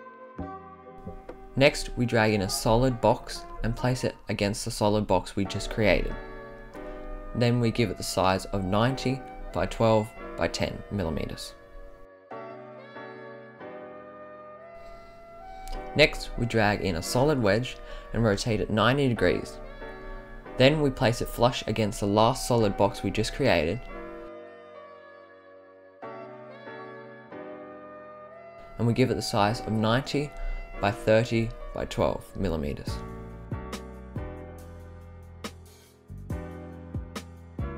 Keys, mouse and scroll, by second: 1.9 click, 2.4-4.1 right drag, 5.7-6.6 right drag, 7.5-8.9 drag, 9.2-10.3 drag, 10.7 click, 12.0-13.0 right drag, 14.1-14.7 scroll up 5, 15.4 click, 16.8 click, 18.4-20.2 drag, 20.9 click, 21.5-22.8 right drag, 23.4-23.8 drag, 23.9 click, 24.3-25.6 drag, 26.1 click, 26.5-27.7 right drag, 28.3 click, 29.2-30.2 drag, 31.0-32.8 drag, 33.0-33.3 right drag, 33.7-35.4 drag, 35.9 click.